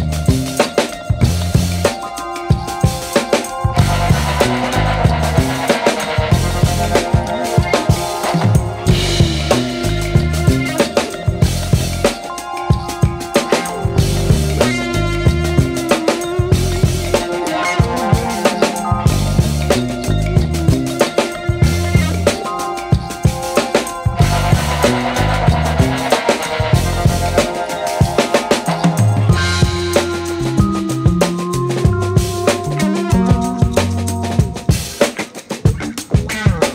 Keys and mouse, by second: 0.5 g, 2.0 shift+right click, 2.3 g, 3.7 shift+right click, 4.7 right click, 5.1 shift+right click, 5.6 g, 6.1 alt+z, 7.1 g, 8.9 shift+right click, 9.2 g, 10.2 right click, 10.5 shift+right click, 12.6 alt+z, 13.2 g, 14.3 g, 16.2 right click, 16.7 shift+right click, 16.9 KP_1, 17.5 alt+z, 18.3 alt+middle click, 18.7 alt+z, 19.5 e, 20.4 w, 22.7 KP_3, 23.3 s, 24.1 g, 26.2 KP_1, 27.0 r, 28.2 KP_3, 28.9 r, 30.4 alt+z, 30.9 g, 31.8 s, 32.6 g, 34.9 r.